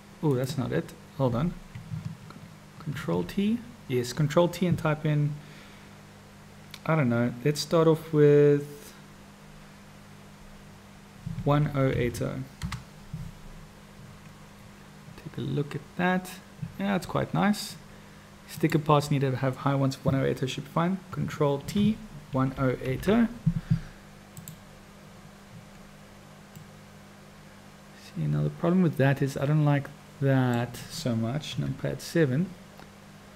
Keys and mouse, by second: 0.3 click, 2.9 ctrl+t, 18.5 click, 21.6 ctrl+t, 26.6 click, 26.8-30.6 middle drag, 31.4 KP_7.